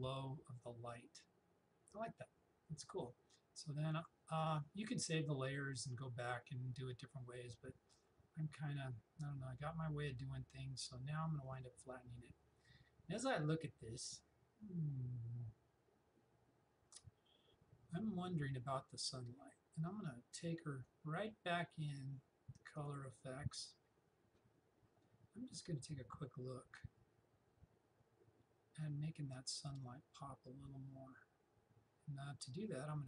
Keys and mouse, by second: 7.9 click, 11.5 click, 20.9-22.8 drag.